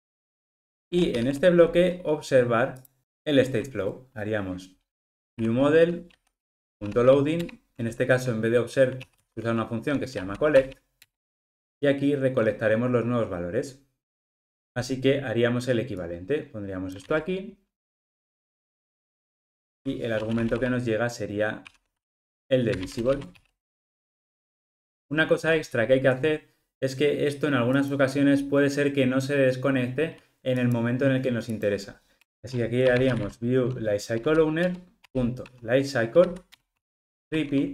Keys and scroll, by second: 0.7 alt+super+l, 1.2 ctrl+alt+o, 6.4 Return, 17.0 super+x, 34.6 Return.